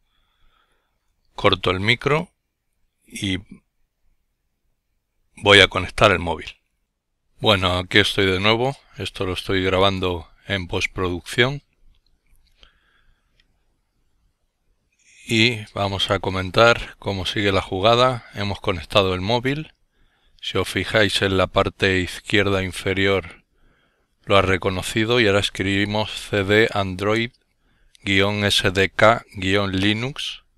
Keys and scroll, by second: 15.8-20.1 typing, 21.2-26.1 typing, 29.8 Return.